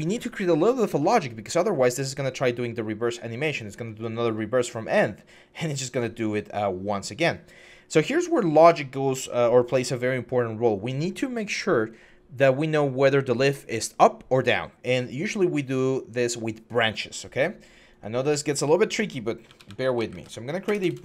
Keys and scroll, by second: 19.3-21.0 typing.